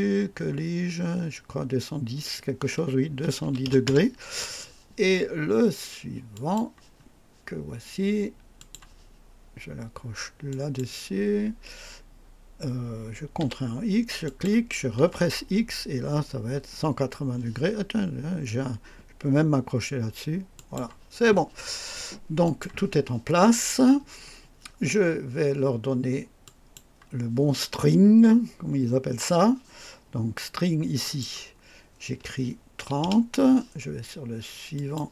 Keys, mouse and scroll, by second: 3.1 KP_2, 3.4 KP_1, 3.6 KP_0, 3.8 Return, 6.2 click, 8.5 click, 10.4 click, 13.3 x, 14.1 click, 14.9 x, 20.5 click, 22.3 click, 26.3 click, 30.9 click, 32.7 KP_3, 32.9 KP_0, 34.7 click.